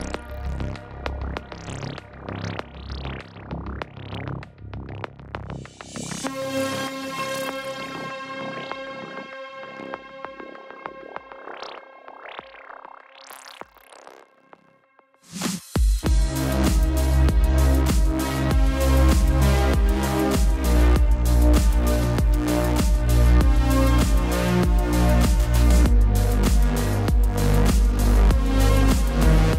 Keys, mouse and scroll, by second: 7.5 click, 15.6 click, 22.2 click, 25.2 click.